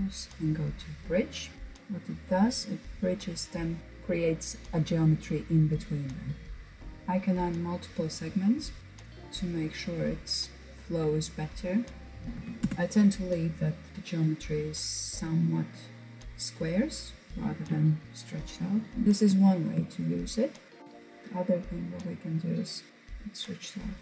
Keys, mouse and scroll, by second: 1.1-1.5 scroll down 2, 1.5-3.4 middle drag, 4.1-5.3 middle drag, 5.3-6.4 scroll up 1, 6.4-8.8 drag, 8.8-12.0 middle drag, 12.0 scroll up 2, 12.2-12.8 drag, 12.8-13.1 scroll down 2, 13.1-13.9 middle drag, 13.9-15.2 scroll up 3, 15.2 click, 19.0 shift+middle click, 19.2 click, 19.7-20.4 scroll up 2, 20.4 shift+middle click, 21.8 click, 22.9 click.